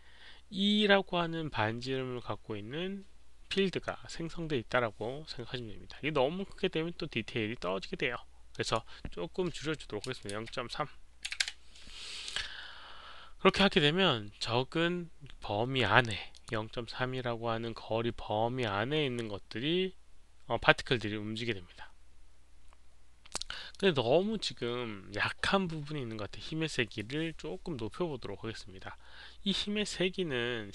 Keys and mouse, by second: 8.5 click, 10.1 click, 10.1-11.4 typing, 11.3 click, 11.4 Return, 11.4 click, 13.4 click, 16.3 click, 16.4 Return, 16.4 KP_0, 16.4 KP_Decimal, 16.4 KP_3, 20.8 Return, 20.8 click, 20.8 KP_3, 20.8 KP_Decimal, 22.0 Return, 22.0 click, 23.8 click.